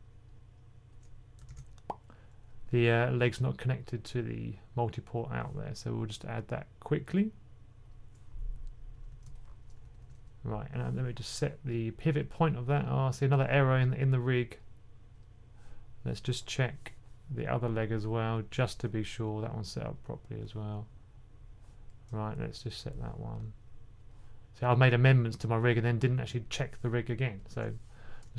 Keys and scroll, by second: 1.4 super+p, 8.8-9.9 typing.